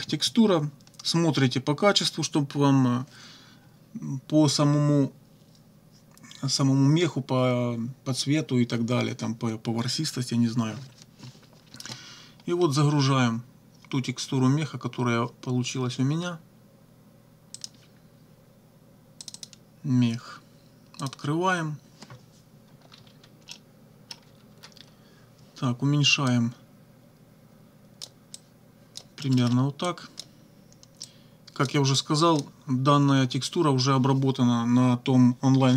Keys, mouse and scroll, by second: 17.6 click, 19.2 click, 21.0 click, 22.8 -, 23.5 click, 24.2 -, 26.3-28.2 drag, 28.4 click, 29.4 middle click, 29.9 click, 31.0 click, 32.0 click.